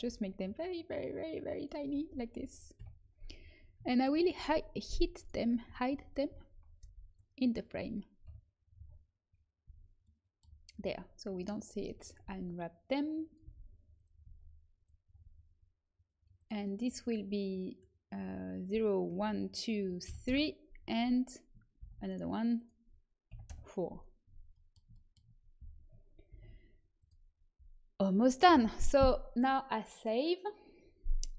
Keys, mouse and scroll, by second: 0.0 s, 2.7 KP_1, 4.3 g, 6.7 g, 8.2 KP_3, 9.6 z, 10.7 Tab, 11.4 click, 12.2 s, 13.4 g, 14.2 s, 16.3-20.9 drag, 20.9 Tab, 21.7 shift+d, 22.5-24.1 drag, 26.2 ctrl+s.